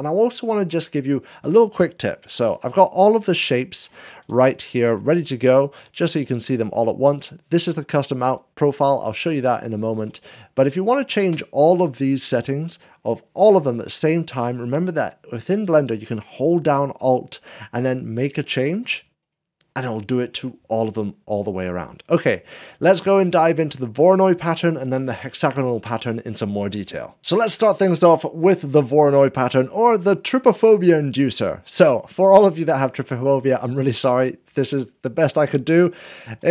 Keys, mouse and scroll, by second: 2.3 7, 2.8 scroll, 3.0 scroll down 1, 3.2 shift+middle click, 3.5 shift+middle click, 3.5-4.2 scroll down 2, 4.6 shift+middle click, 5.1-6.5 drag, 6.2 scroll down 6, 9.5-10.5 shift+drag, 10.3 scroll down 7, 10.4 scroll up 1, 10.7-11.7 shift+middle drag, 12.4 scroll up 1, 13.7 scroll up 1, 19.0-20.1 alt+drag, 31.5-36.5 middle drag.